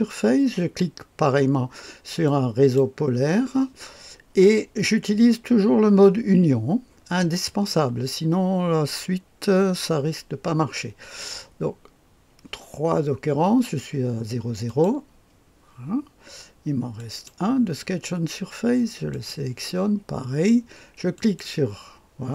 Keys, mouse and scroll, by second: 2.2 click, 14.6 click, 16.9 click, 19.1 click, 21.1 click.